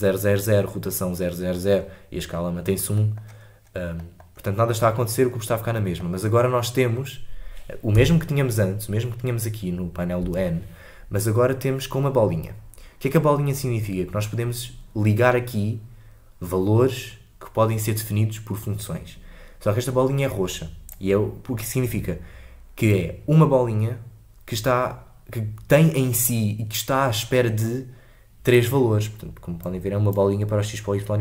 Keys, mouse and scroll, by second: 3.5-3.9 scroll down 3, 7.9 n, 10.2 n, 20.9 click, 28.5-31.2 drag.